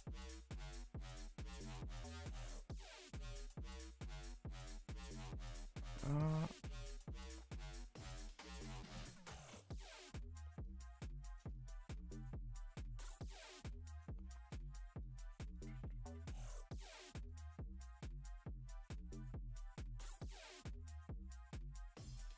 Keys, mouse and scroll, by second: 0.2 scroll up 1, 0.5 g, 2.1 click, 2.4 shift+click, 2.9 g, 5.7-7.0 middle drag, 7.0 Tab, 7.2 Tab, 7.4 shift+middle click, 8.0 a, 8.1 a, 8.2 click, 8.7 middle click, 9.7 KP_0, 10.4 shift+middle click, 10.6-11.1 scroll up 9, 11.1 shift+middle click, 11.8-12.2 scroll up 1, 12.2 g, 14.4 click, 14.8 click, 15.1 g, 18.3 click, 18.5 g, 19.4 click, 19.6 g, 20.7 scroll down 3, 20.9 Tab, 21.2 a, 21.3 a, 21.7 ctrl+s, 22.1 Tab.